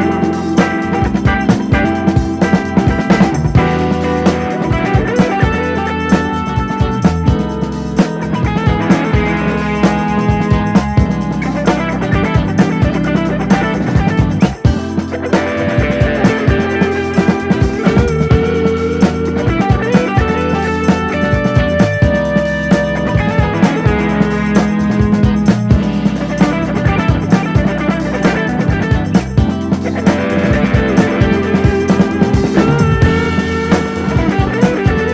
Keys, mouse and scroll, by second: 0.0-0.5 shift+middle drag, 0.5 click, 1.0-2.1 drag, 4.1 g, 4.3 click, 4.8 click, 5.2 KP_0, 7.4-8.5 drag, 11.5-12.6 drag, 14.7 click, 15.4 g, 16.5 click, 18.2 click, 19.7 click, 20.7-21.2 drag, 23.0 click, 23.2-23.5 scroll down 2, 23.5-24.5 drag, 25.3 click, 26.7-27.7 drag, 31.0 click, 31.4 KP_0, 32.3 click, 32.7 KP_0, 34.1-34.7 scroll down 1, 34.7 click.